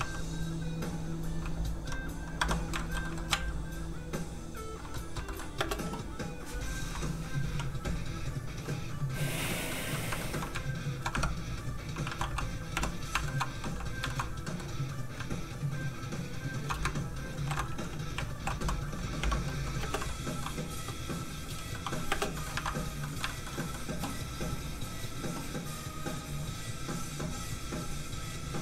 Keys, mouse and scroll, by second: 2.4 Escape, 2.8 shift+middle click, 3.0 middle click, 3.1 middle click, 3.2 r, 3.3 z, 4.7 click, 4.9 middle click, 5.1 shift+middle click, 5.6 shift+middle click, 5.6 space, 9.4 middle click, 9.4 click, 10.2 shift+middle click, 10.9 shift+click, 11.1 shift+Tab, 11.3-11.9 scroll up 1, 12.1 alt+a, 12.7 l, 13.3 shift+middle click, 13.7 shift+h, 14.1 shift+middle click, 15.0 click, 15.0 middle click, 15.5 shift+click, 16.4 shift+click, 17.4 ctrl+shift+p, 17.7 click, 18.4 alt+h, 19.2 Tab, 19.5 middle click, 19.8 space, 20.1 middle click, 22.1 space, 22.4 middle click, 22.5 alt+a, 23.0 a, 23.1 middle click, 23.3 shift+middle click, 23.6 middle click, 23.7 middle click, 24.8 click.